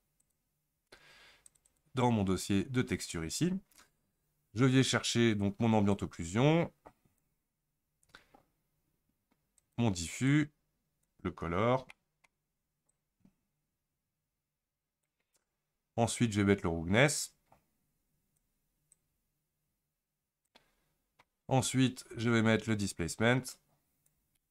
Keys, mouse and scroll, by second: 11.1 click, 24.1 click.